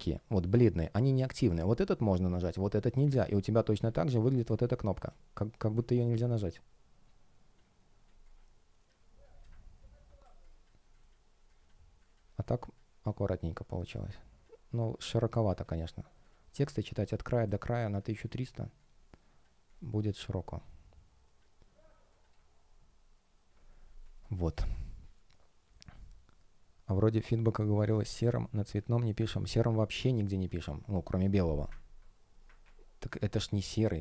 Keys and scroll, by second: 4.4 space, 10.1 space, 23.1 super+w.